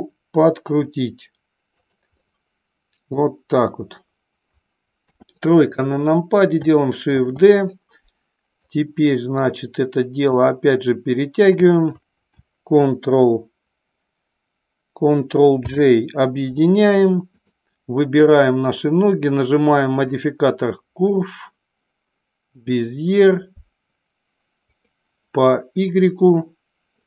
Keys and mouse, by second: 1.7 click, 2.1-3.1 middle drag, 5.0 KP_3, 7.2 shift+d, 7.5 click, 8.5-10.3 drag, 11.6 shift+click, 15.6 ctrl+j, 19.0-20.1 drag, 21.0-22.7 drag, 24.6-26.0 drag.